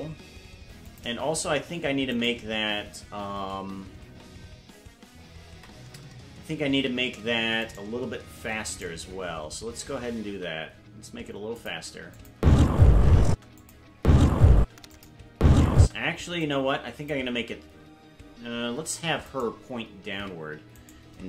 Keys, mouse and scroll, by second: 0.9 click, 2.1 right click, 7.6 right click, 8.6 shift+right click, 10.2 s, 12.1 click, 12.3-15.8 typing, 13.6 click, 14.9 click, 16.4 click, 19.3 right click, 20.1 ctrl+Tab, 20.8 right click.